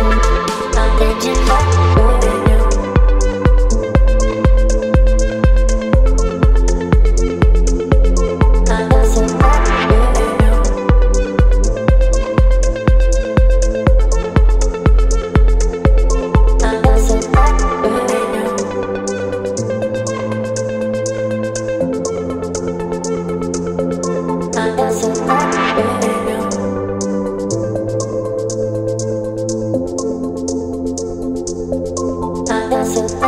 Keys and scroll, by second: 8.5 Return, 8.7 space, 11.1 Delete, 11.4 space, 12.8 Delete, 13.8 space, 16.8 p, 17.1 space, 17.5 v, 18.3 p, 25.1 alt+space, 29.1 Return, 29.6 ctrl+d, 30.7 space, 31.5 v, 32.7 space.